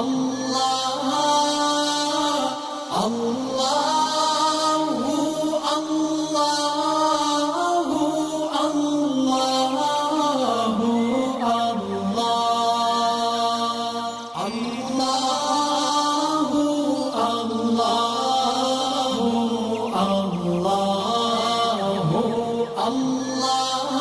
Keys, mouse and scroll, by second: 1.7-4.0 shift+drag, 6.5-9.4 drag, 12.9-13.5 alt+scroll down 2, 13.7-14.2 alt+scroll up 2, 14.2-17.1 drag, 18.1 alt+scroll down 1, 18.4 space, 18.4 click, 19.2 alt+scroll up 1, 20.3-24.0 drag.